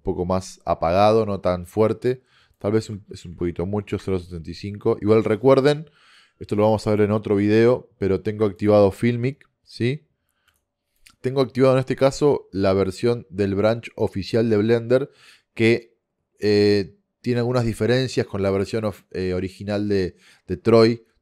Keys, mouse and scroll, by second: 2.6-4.5 drag.